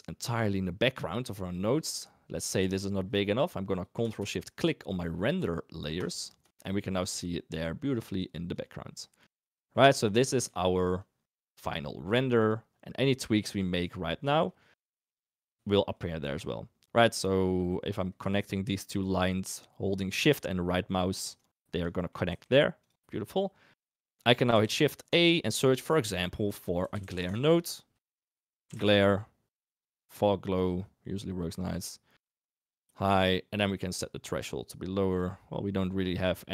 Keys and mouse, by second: 3.7 click, 6.0 ctrl+shift+click, 7.7 click, 8.5 click, 9.4 middle click, 10.0-10.4 drag, 10.9 click, 11.8 click, 12.3 click, 13.4 click, 15.7 shift+click, 18.4-21.4 shift+right drag, 22.2 g, 23.0 drag, 23.9 click, 24.6 shift+a, 27.8 Return, 27.9 Return, 28.1 shift+a, 29.8-30.7 drag, 32.5 click, 33.8-35.2 drag, 36.0 click.